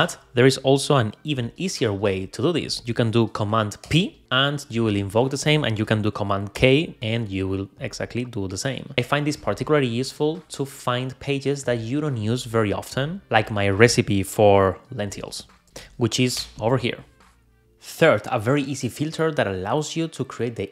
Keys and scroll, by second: 0.0 Escape, 3.8 super+p, 5.4 Escape, 6.6 super+k, 15.6 Return.